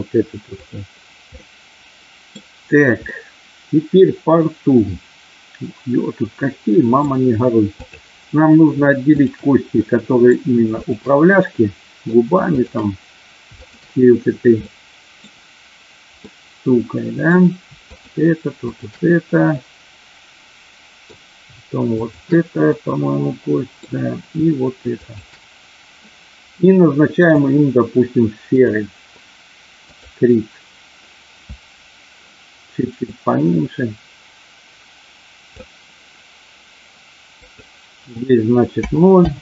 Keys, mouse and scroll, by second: 0.5 click, 1.4 middle click, 3.0-7.0 middle drag, 9.1 shift+click, 9.8 middle click, 11.4 middle click, 12.4 shift+click, 13.5 shift+click, 14.6 middle click, 16.1-17.1 middle drag, 17.8 shift+click, 19.6-21.0 middle drag, 22.5-23.8 middle drag, 25.0 shift+click, 27.1-28.8 drag, 29.9 click, 33.2-35.5 drag, 37.3-39.4 drag.